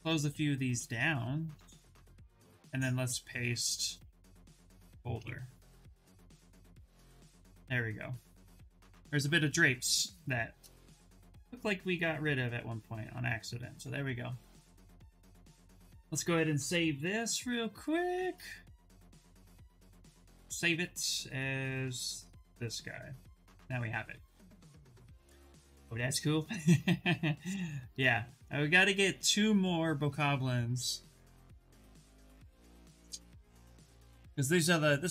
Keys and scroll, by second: 16.7 ctrl+n.